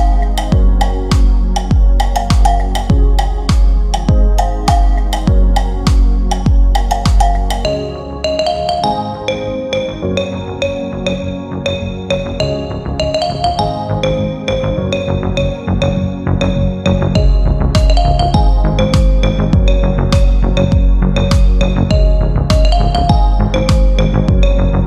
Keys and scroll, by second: 3.6 F3, 7.1 g.